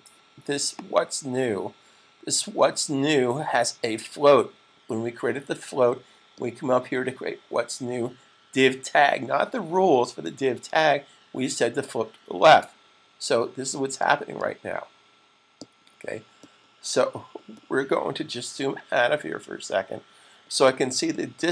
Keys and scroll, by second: 18.7 super+-.